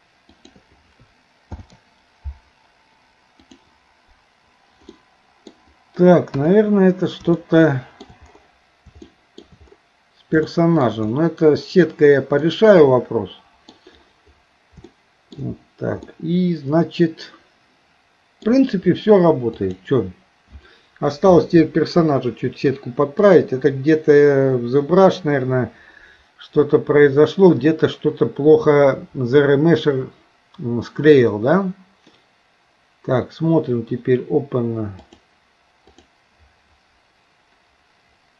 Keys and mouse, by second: 0.4 shift+click, 4.9 middle click, 7.4 shift+middle click, 9.1 shift+middle click, 10.5 shift+middle click, 12.4-13.7 middle drag, 14.9 shift+middle click, 16.1-18.4 middle drag, 21.9-23.2 drag, 23.4-36.6 drag.